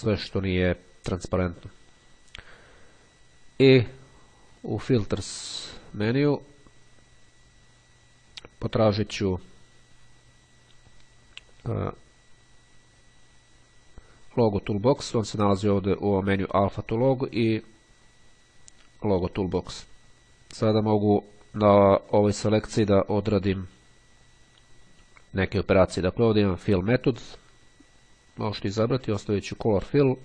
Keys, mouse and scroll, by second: 4.7 click, 20.4 click, 26.6 click, 29.2 click.